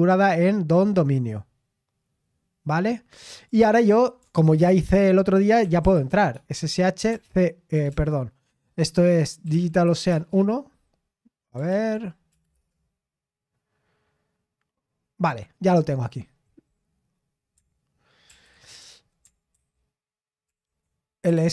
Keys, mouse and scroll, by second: 1.2 scroll down 1, 3.3 click, 4.6 ctrl+c, 5.6-7.9 typing, 9.4-9.8 typing, 10.1 Return, 11.7 ctrl+p, 12.3 BackSpace, 12.5 Return, 18.2 ctrl+l, 19.5 ctrl+c, 20.4 ctrl+l, 21.2-21.5 typing.